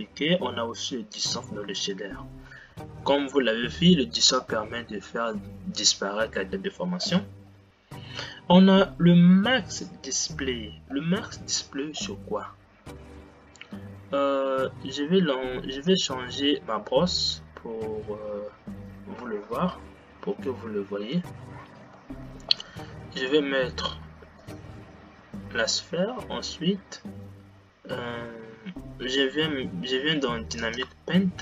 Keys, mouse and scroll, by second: 17.0 click, 20.7 Delete, 25.1 shift+a, 31.3 click.